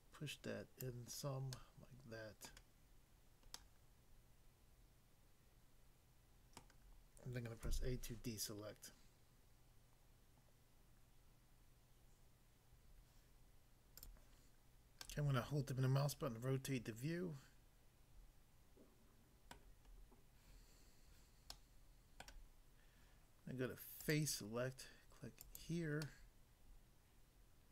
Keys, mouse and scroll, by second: 0.8 click, 1.6 middle click, 2.5 middle click, 3.6 middle click, 6.6 middle click, 7.6 a, 14.0 click, 14.2 click, 15.0 middle click, 19.5 middle click, 19.9 scroll up 1, 21.5 middle click, 22.2 middle click, 24.0 click, 24.1 click, 25.4 click, 25.6 click, 26.1 middle click.